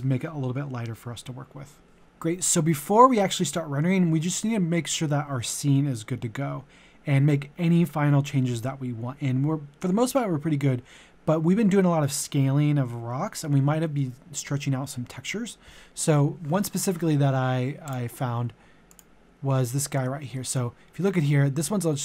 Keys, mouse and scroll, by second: 19.9 shift+f, 20.3 middle click, 21.3 scroll up 1, 21.6 middle click.